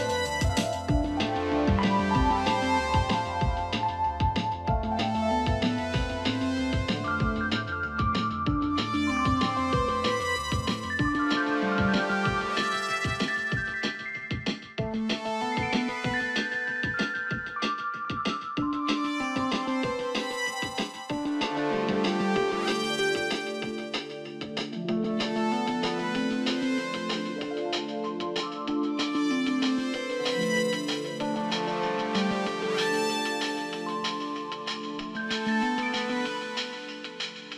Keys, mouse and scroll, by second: 18.0 ctrl+=, 23.3 ctrl+=, 35.3 click.